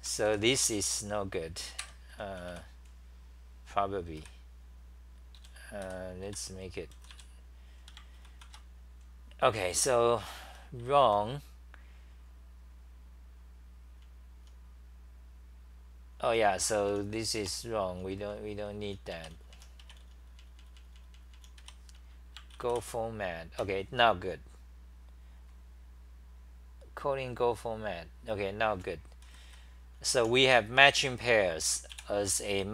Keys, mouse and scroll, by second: 0.3 6, 0.7 ;, 2.1 ctrl+g, 2.1 c, 2.3 c, 2.5 c, 4.2 6, 5.4-7.6 typing, 8.4 ctrl+c, 10.6 r, 10.8 r, 13.8 r, 17.1-22.1 typing, 22.7 ctrl+c, 29.3-31.9 typing.